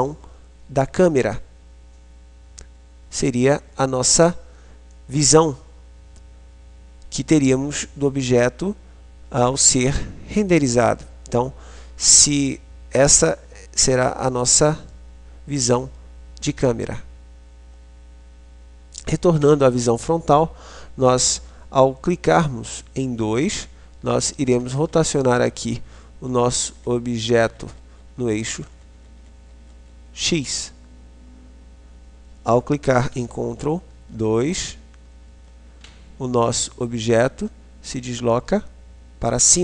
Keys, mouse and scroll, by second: 19.5 KP_1, 23.6-30.3 typing, 34.0-35.5 ctrl+KP_2, 36.0 ctrl+KP_2, 36.5 ctrl+KP_2.